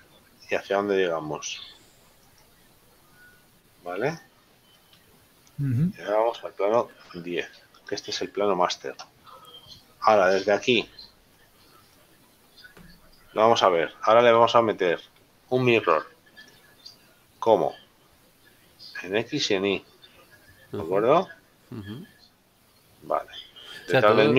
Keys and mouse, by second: 2.2 right click, 4.2 right click, 6.9 click, 8.0 right click, 10.3 shift+middle click, 11.9 shift+middle click, 17.3 click, 21.0 middle click.